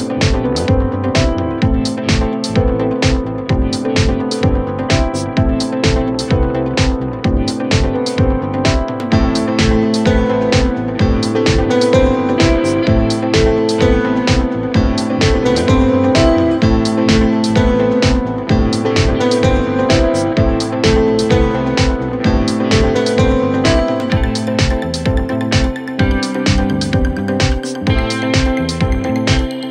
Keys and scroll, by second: 3.4 ctrl+d, 3.5 Escape, 5.5-8.4 typing, 8.7 F2, 19.7 p, 20.3 p, 21.5-23.6 typing.